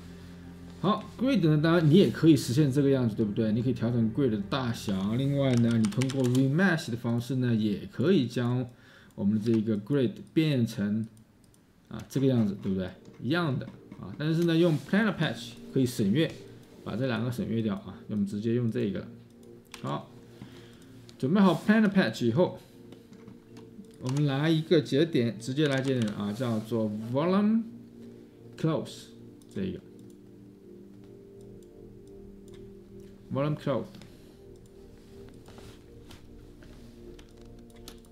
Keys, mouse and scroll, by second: 4.9-6.7 typing, 9.5 Escape, 12.1-14.5 Escape, 19.7-23.0 Delete, 23.2-23.6 space, 24.0 Tab, 25.6-26.3 typing, 37.7 space.